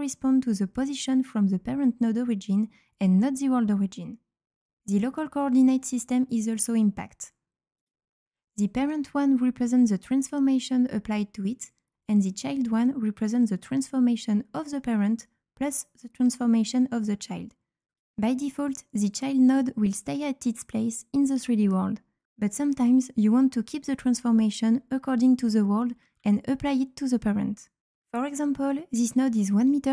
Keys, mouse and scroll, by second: 4.9 click, 7.1 click, 7.7 click, 9.0 click, 12.9 click, 15.9 click, 17.9 click, 23.2 ctrl+z, 23.7 ctrl+z, 25.7 right click, 25.9 s, 26.2 q, 27.6 click.